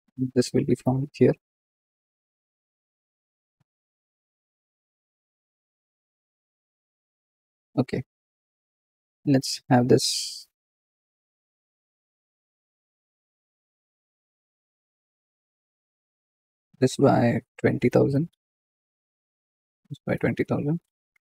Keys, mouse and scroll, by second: 0.7 r, 2.5 KP_7, 3.5 g, 9.3 click, 11.6 r, 13.4 click, 14.3 r, 18.2 KP_0, 19.0 click, 20.9 KP_0.